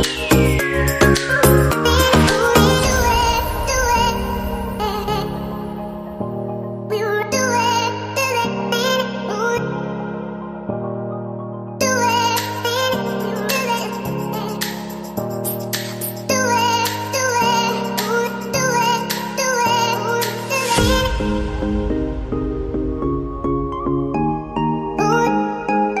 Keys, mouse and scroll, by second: 0.4 ctrl+click, 7.2 ctrl+right click, 9.3 ctrl+r, 9.6 ctrl+r, 9.9 ctrl+r, 10.2 ctrl+r, 10.5 ctrl+r, 10.9 ctrl+r, 11.7 ctrl+r, 13.7 double click, 16.5 ctrl+click, 21.3 right click, 23.5 ctrl+r, 23.9 ctrl+r, 24.2 ctrl+r, 24.5 ctrl+r, 24.9 ctrl+r, 25.1 ctrl+r.